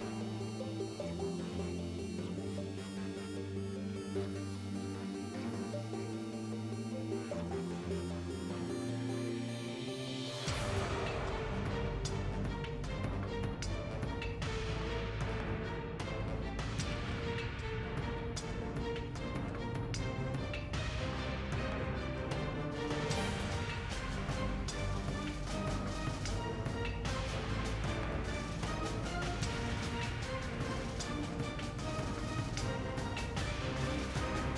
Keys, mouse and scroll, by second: 1.5 ctrl+Tab, 1.8 ctrl+x, 3.2 a, 5.4 middle click, 5.8 KP_1, 6.2 KP_3, 7.6 ctrl+Tab, 8.1 a, 8.2 a, 8.9 r, 10.2 ctrl+Tab, 17.2 a, 17.5 g, 20.2 KP_1, 20.9 ctrl+Tab, 22.9 a, 22.9 a, 23.0 w, 24.9 ctrl+Tab, 26.0 KP_1, 26.2 z, 26.9 e, 29.2 middle click, 29.3 ctrl+Tab.